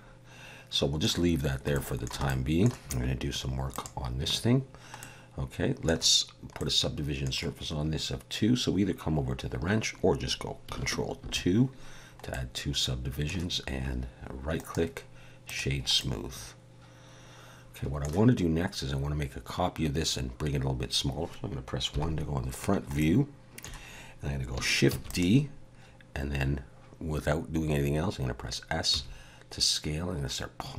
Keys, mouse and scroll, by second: 1.7 shift+middle click, 2.3 middle click, 3.7 click, 5.0 middle click, 6.6 middle click, 11.2 ctrl+2, 12.3 middle click, 14.6 right click, 16.0 middle click, 21.9 KP_1, 23.0 shift+middle click, 24.9 shift+d, 28.9 s.